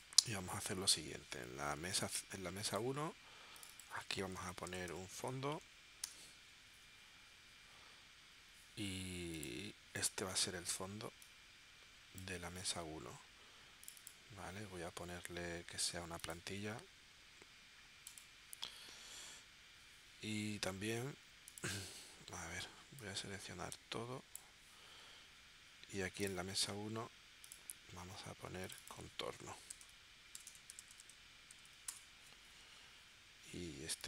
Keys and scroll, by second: 4.1-5.3 typing, 29.1-32.1 typing.